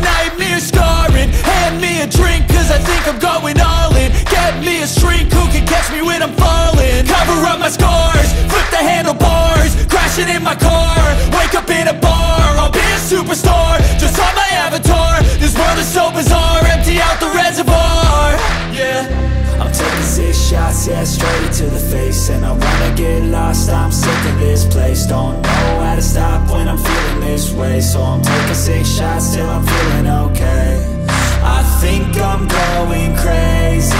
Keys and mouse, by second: 8.0 shift+click, 9.4-14.5 drag, 17.6 click, 19.3 g, 26.4 g.